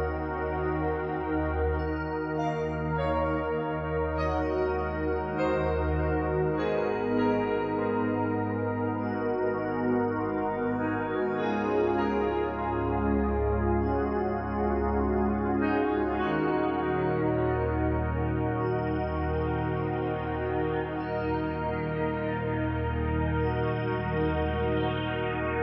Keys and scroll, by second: 1.9 ctrl+t.